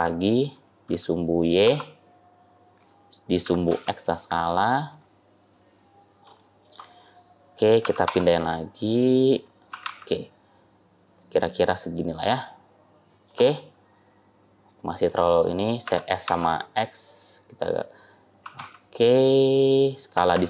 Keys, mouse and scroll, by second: 0.8 s, 3.3 s, 5.4 middle click, 6.3 shift+middle click, 7.7 g, 9.6 g, 12.4-13.2 scroll down 5, 13.2 middle click, 13.2 click, 13.2-14.9 scroll up 1, 14.9 click, 15.7 s, 18.3 g, 20.0 s.